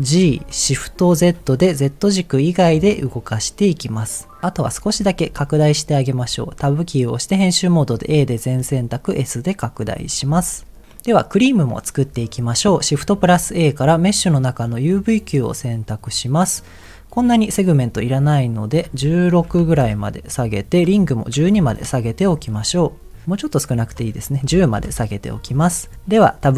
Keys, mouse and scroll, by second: 0.2 g, 1.1 shift+z, 4.4 click, 4.4 middle click, 4.4-4.8 scroll up 2, 6.2 Tab, 8.1 a, 8.6 s, 9.7 click, 10.0 Tab, 10.2 click, 10.5 middle click, 11.0 scroll down 2, 12.0-12.7 scroll down 1, 13.1 shift+a, 16.0-16.8 scroll down 5, 18.7-19.9 drag, 20.7-21.7 drag, 23.8-24.8 drag.